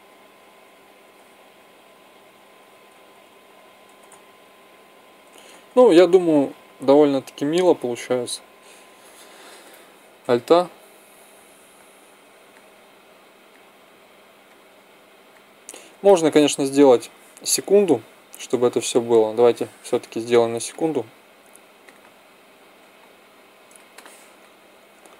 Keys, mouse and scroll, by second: 0.1 Right, 0.4 Right, 0.6 Right, 1.2 Left, 1.5-2.5 Left, 2.8 Right, 3.0-3.5 Right, 3.7 Left, 4.0 Left, 4.1 Left, 4.3 Left, 4.5 Left, 4.6 Left, 4.9 Left, 5.2 Right, 5.4 Right, 5.6 Right, 5.7 Right, 6.0 Right, 6.2 Right, 6.4 Right, 6.5 Right, 6.9 Right, 7.3 Left, 7.5 Left, 7.7 Left, 8.2-8.6 Left, 10.1 alt+a, 16.4 Escape.